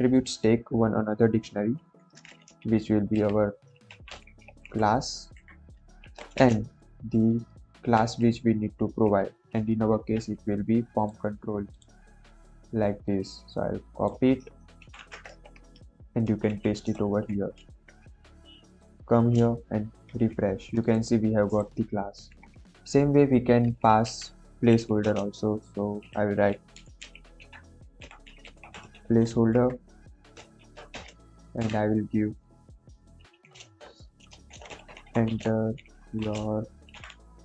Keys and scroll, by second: 1.8 shift+[, 1.9 shift+], 2.4 Left, 3.1-6.3 typing, 5.3 Right, 7.7 shift+', 16.4 ctrl+v, 16.9 ctrl+s, 24.0 Right, 24.6-29.5 typing, 30.5 shift+;, 30.8 space, 31.5 ', 34.2-37.4 typing.